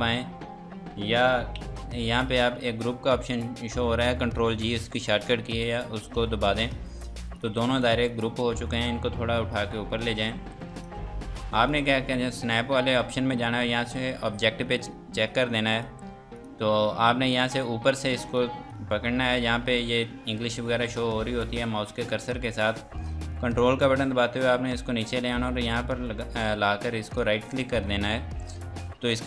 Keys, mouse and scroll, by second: 5.5 click, 15.7 click, 18.1 F2, 18.3 click, 23.3 click, 27.2 ctrl+right click.